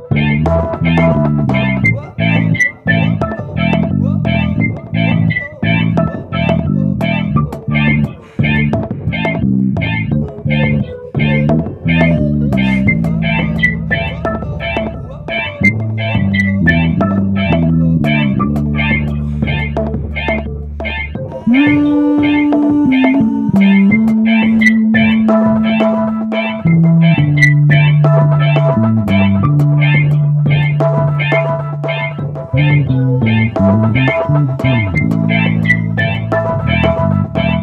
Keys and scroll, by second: 16.5 Return, 16.5 typing.